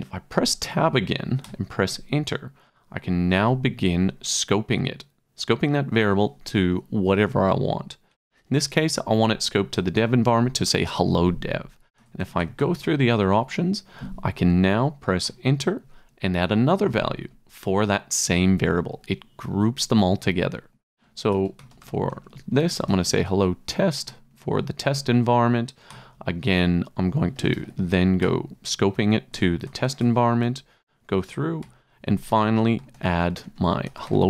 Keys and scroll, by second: 1.4 Return, 2.9-4.0 typing, 8.1 Down, 10.0 Return, 12.0 Tab, 15.2 Return, 21.0-24.2 typing, 24.9 shift+Tab, 25.9 Return, 27.1-28.0 typing, 28.2 Return, 29.7 Tab, 31.6 Return, 32.5-34.2 typing.